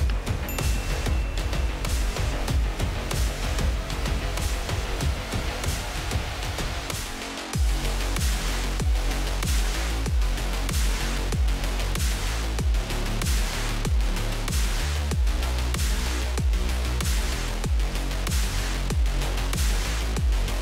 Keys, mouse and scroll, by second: 2.7-3.7 drag, 6.0 scroll up 2, 6.2 shift+middle drag, 6.7-8.0 drag, 8.3 scroll up 2, 8.7 shift+middle drag, 9.0 click, 9.5 shift+middle drag, 10.7 KP_1, 10.9-11.3 scroll down 1, 11.3-11.9 middle drag, 11.9 shift+a, 13.3 s, 14.6 s, 15.6-15.9 middle drag, 15.9 scroll down 2, 16.4 click, 16.5 x, 16.9 shift+a, 18.2 z, 18.7 g, 19.6 s, 20.2 click.